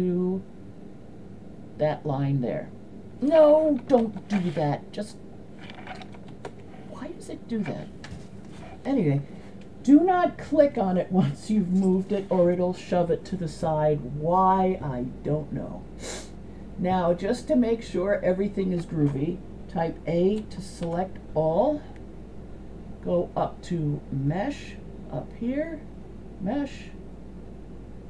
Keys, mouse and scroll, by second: 2.3 click, 4.1 ctrl+z, 4.8 click, 6.5 ctrl+z, 20.4 a, 20.9 a, 26.2-28.0 drag.